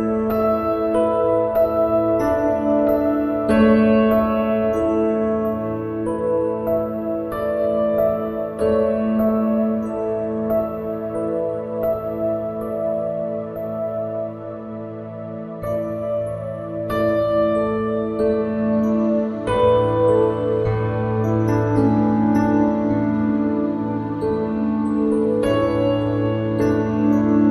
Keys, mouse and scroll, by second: 0.1 middle click, 0.9 z, 1.1 z, 1.3 click, 2.1 middle click, 2.5 middle click, 3.0 click, 4.0 click, 4.9 ctrl+z, 5.1 ctrl+z, 5.3 click, 6.4 click, 6.9 middle click, 7.5-8.6 drag, 8.9 KP_7, 9.8 click, 12.0 middle click, 12.8 click, 13.6 middle click, 13.8 click, 15.5 click, 16.0 click, 18.0 ctrl+alt+r, 19.4 click, 19.8 KP_1, 21.3 KP_7, 22.7 KP_1, 23.2 shift+z, 25.1 shift+z, 26.3 ctrl+s.